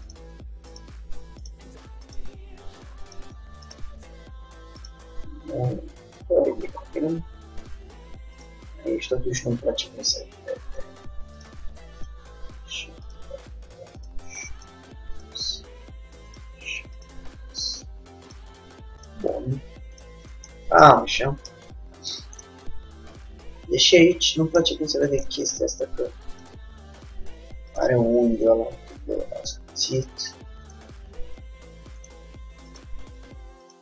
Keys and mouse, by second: 1.2 g, 2.3 g, 4.0 g, 6.0-8.5 middle drag, 8.5-10.4 drag, 8.8 g, 12.1-13.9 drag, 12.4 g, 14.3 g, 15.7 g, 17.2-19.3 drag, 17.3 g, 19.3 g, 20.7 click, 20.9 middle click, 21.7 Tab, 23.7 middle click, 23.8 click, 25.6 Tab, 26.6 g, 28.5-30.3 drag, 28.7 g, 30.8-32.6 drag, 30.9 g, 32.8-33.8 drag, 33.0 g.